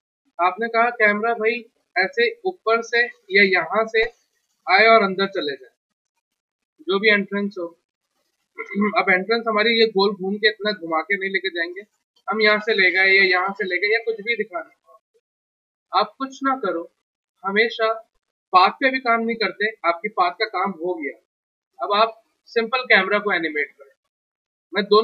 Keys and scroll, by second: 8.8 w, 22.1 w, 22.3 t, 23.7 g, 24.8 F3.